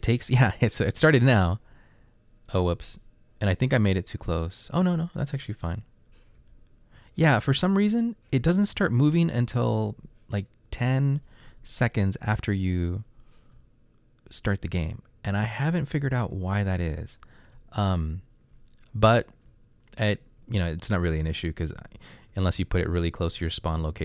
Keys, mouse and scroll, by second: 0.7-1.5 typing, 2.6-7.0 typing, 8.4 typing, 9.6 typing, 10.9-12.1 typing, 13.2-20.0 typing, 21.3-24.0 typing.